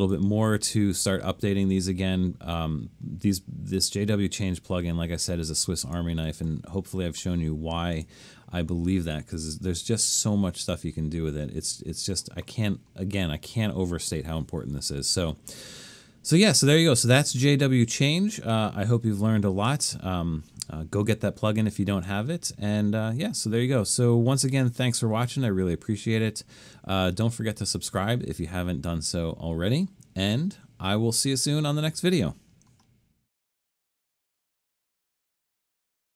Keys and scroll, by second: 9.7 super+-, 10.4 super+-, 11.6 super+-, 31.3 typing.